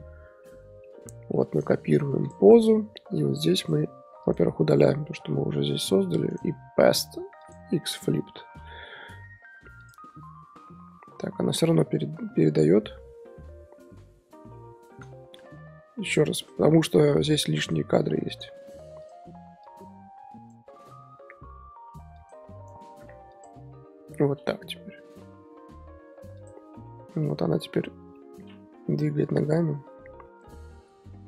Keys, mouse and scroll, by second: 0.6 scroll down 4, 0.8-1.5 middle drag, 1.5-2.5 right drag, 1.5 z, 2.5-3.5 middle drag, 3.5-4.3 drag, 5.4 Delete, 6.0 middle drag, 6.3-8.5 right drag, 8.5 i, 9.8 click, 10.4 z, 11.4 ctrl+z, 12.9-13.4 scroll up 3, 13.7 scroll down 3, 14.0 ctrl+z, 14.5 ctrl+z, 15.0 a, 16.0-17.2 drag, 17.4 x, 18.3 click, 19.0-20.7 drag, 20.7-21.1 scroll up 3, 22.1-22.6 drag, 22.6-24.7 right drag, 24.7 i, 26.3 click, 27.2-28.8 middle drag, 28.8 KP_1, 29.0 KP_1, 29.8 scroll up 3.